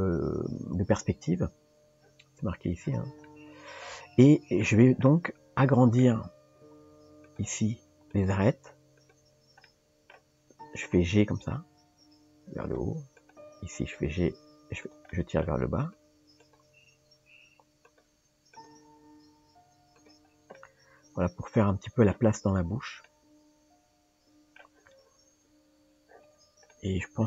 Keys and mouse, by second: 3.3-4.6 middle drag, 5.1 middle click, 7.3 click, 8.1 click, 9.0 shift+click, 9.6 middle click, 13.2 click, 15.1 middle click, 15.8 click, 16.5 click, 17.9 g, 18.5 click, 20.6-22.1 middle drag, 23.0-24.6 middle drag, 26.7 middle click.